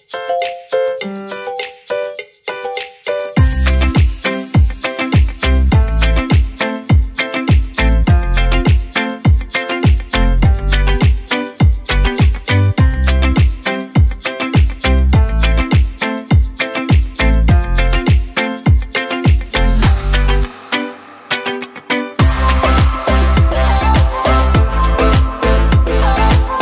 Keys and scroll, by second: 8.6 BackSpace, 8.8 KP_1, 9.0 KP_0, 9.1 KP_0, 10.6 BackSpace, 10.9 KP_2, 21.8 BackSpace, 22.1 KP_1, 22.4 KP_0, 22.6 KP_0, 24.1 BackSpace, 24.4 KP_2.